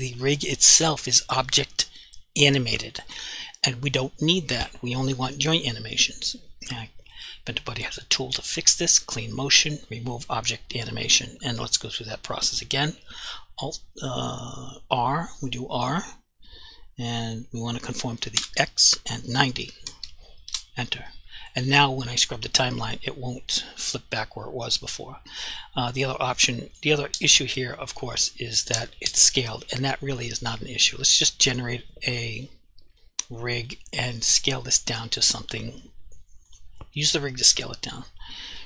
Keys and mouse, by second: 2.9 click, 7.0 click, 13.2 r, 18.4 x, 19.7 typing, 20.5 Return, 22.8 click, 31.4 click, 37.4 s, 38.5 click.